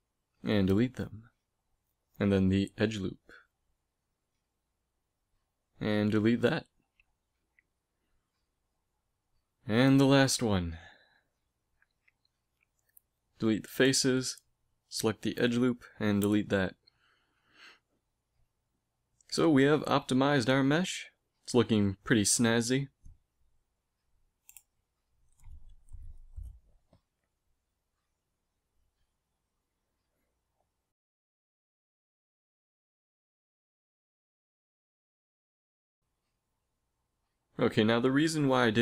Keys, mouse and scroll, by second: 0.5 x, 2.8 b, 3.9 ctrl+Tab, 5.4-7.4 right drag, 5.7 x, 7.4 middle click, 7.6 middle click, 7.9 a, 9.5 ctrl+Tab, 10.9-14.2 right drag, 12.7 x, 14.4 ctrl+Tab, 15.4-17.1 right drag, 15.7 x, 16.9 z, 17.1 middle click, 17.9 a, 18.7 Tab, 19.1 a, 21.1 ctrl+s, 29.9 ctrl+s, 32.4 n, 36.5 middle click.